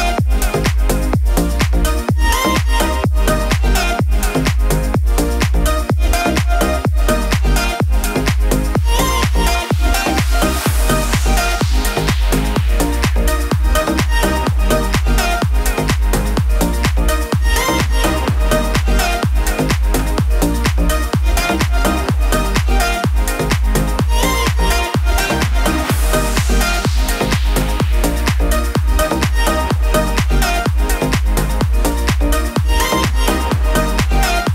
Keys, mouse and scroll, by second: 1.4 -, 1.6 -, 3.6-4.6 shift+click, 4.9 n, 7.7-11.8 drag.